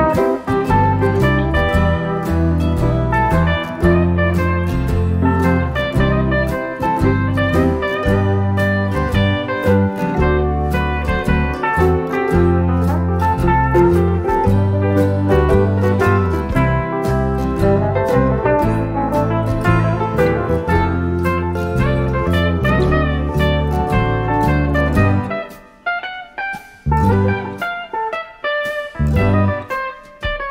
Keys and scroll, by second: 0.7 ctrl+-, 0.9-1.3 typing, 4.5 typing, 5.1 shift+F6, 10.9 F1, 12.9-14.0 typing, 14.7 ctrl+d, 15.4 shift+F6, 21.2 F1, 21.9 ctrl+-, 22.3 typing, 25.8 shift+F6.